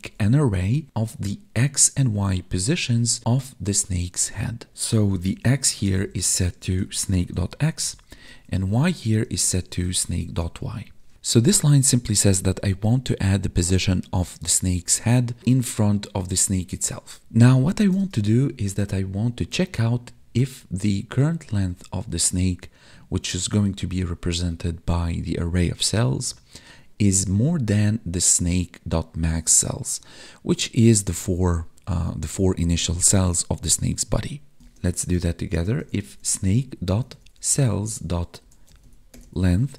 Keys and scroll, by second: 5.8 space, 7.8 space, 9.2 space, 34.6 space.